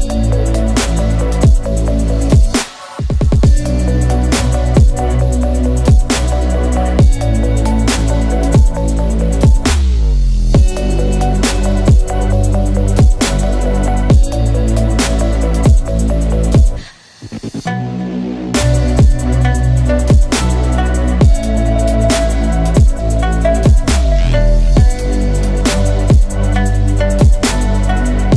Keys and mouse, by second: 12.0 middle click, 22.4 middle click.